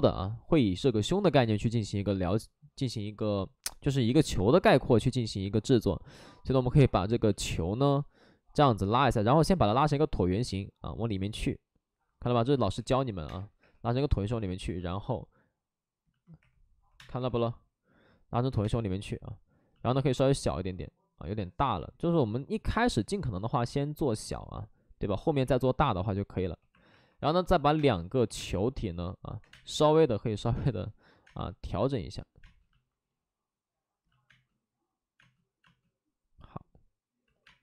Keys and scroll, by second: 4.2 w, 13.2 3, 14.4 w, 16.9 space, 17.1 3, 18.6 space, 19.9 w, 25.4 2, 26.5-29.4 typing, 37.2 ctrl+z, 37.4 space.